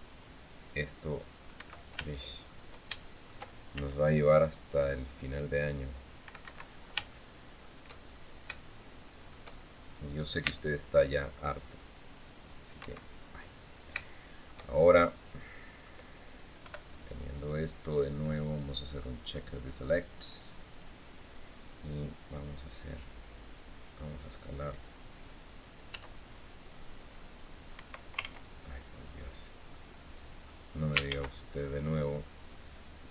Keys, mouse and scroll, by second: 1.3 Escape, 1.8 shift+middle click, 2.1 shift+scroll up 2, 2.7 shift+middle click, 3.5 shift+c, 4.0-6.0 shift+drag, 6.2 Escape, 6.8 shift+click, 7.8 shift+click, 8.5 shift+click, 9.4 shift+scroll down 1, 10.1 c, 10.7-12.5 drag, 12.5 Escape, 12.9-13.6 scroll down 2, 13.8 shift+click, 14.4-15.7 shift+drag, 16.3 KP_7, 18.2 click, 20.4 click, 21.4 scroll down 2, 25.6 s, 27.4 Escape, 27.9 ctrl+z, 28.6-29.1 scroll up 2, 29.4 click, 30.8 ctrl+shift+z, 31.6 scroll down 2, 31.9-33.1 drag.